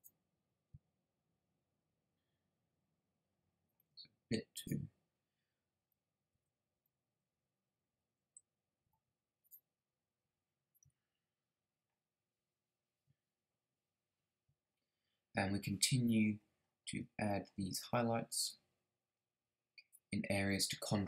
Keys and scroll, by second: 5.7 Down, 6.3 Left, 6.7 Down, 7.3 Up, 8.2 Right, 8.8 Left.